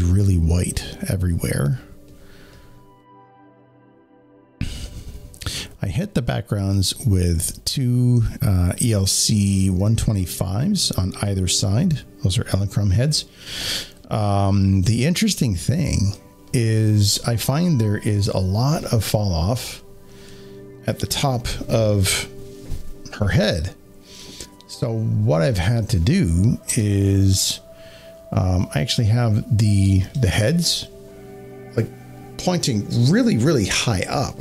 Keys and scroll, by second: 26.6 s.